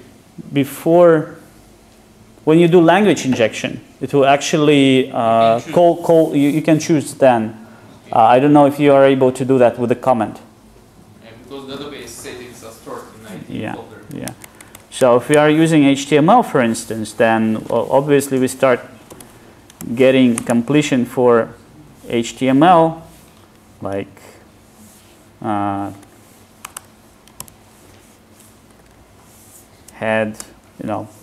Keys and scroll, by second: 21.4 Tab, 30.5 Return.